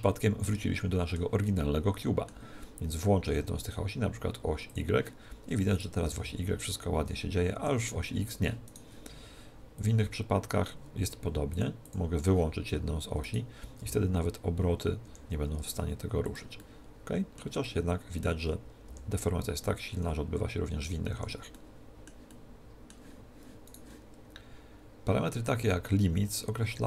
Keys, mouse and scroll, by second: 4.7 click, 5.8 right click, 6.0 g, 8.6 right click, 9.8-13.8 drag, 13.2 middle click, 13.2 right click, 13.8 r, 15.6 r, 16.3 click, 17.9-19.6 middle drag, 18.8 r, 19.3 click, 21.5-23.6 middle drag, 23.6 click, 23.8 middle click, 23.8 right click.